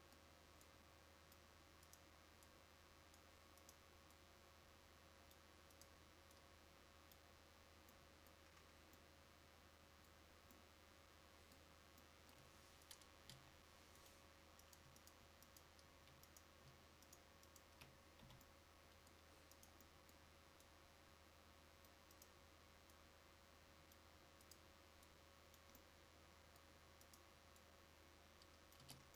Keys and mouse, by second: 13.4 Delete, 18.3 f, 28.9 Tab.